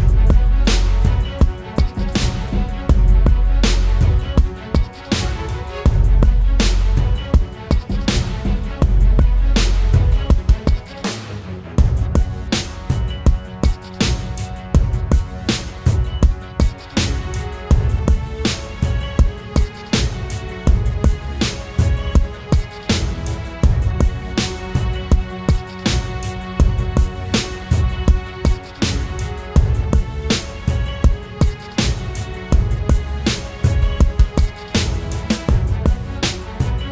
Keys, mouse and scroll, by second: 31.4 double click, 35.1-35.8 typing, 36.3 double click.